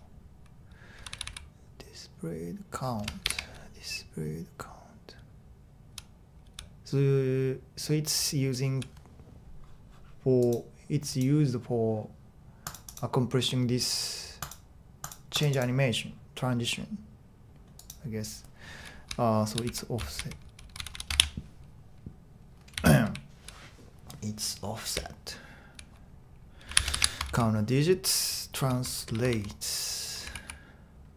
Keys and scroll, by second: 0.0-1.2 typing, 3.2 shift+8, 5.1-5.5 typing, 8.2-8.6 typing, 19.7-23.9 typing, 24.9 typing, 26.4-27.3 typing, 28.3-31.1 typing.